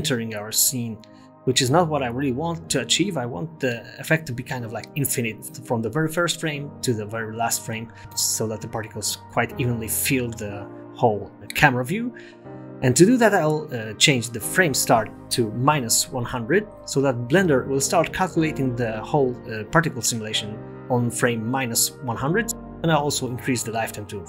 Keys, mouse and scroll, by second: 4.3 space, 7.3 KP_0, 8.0 space, 8.6 space, 12.3 click, 14.3 0, 16.1 click, 17.4 0, 18.3 space, 21.6 space, 23.2 click.